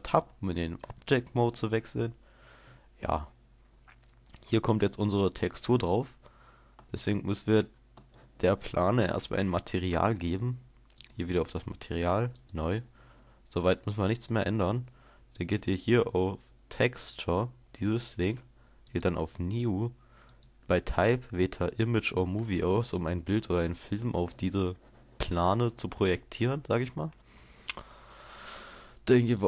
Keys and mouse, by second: 2.9-11.0 middle drag, 11.0-13.9 drag.